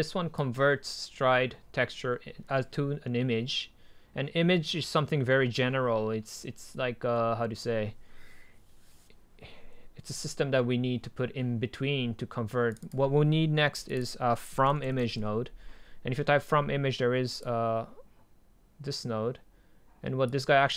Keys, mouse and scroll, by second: 0.0-2.3 drag, 12.8 click.